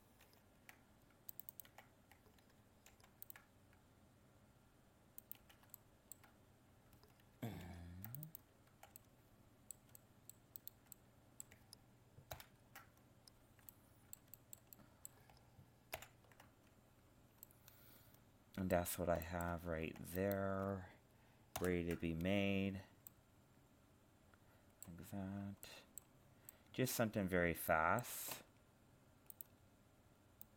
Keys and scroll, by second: 0.2 ctrl+r, 7.7 ctrl+r, 12.3 ctrl+l, 16.0 alt+h, 21.6 ctrl+l.